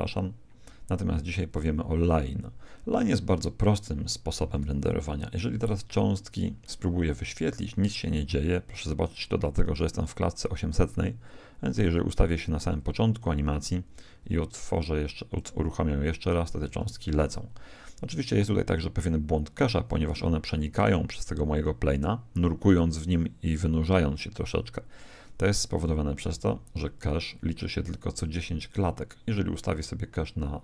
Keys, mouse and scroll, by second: 1.5 click, 5.5 alt+a, 6.8 Escape, 12.2 click, 13.9 alt+a, 26.9 click, 29.6 click.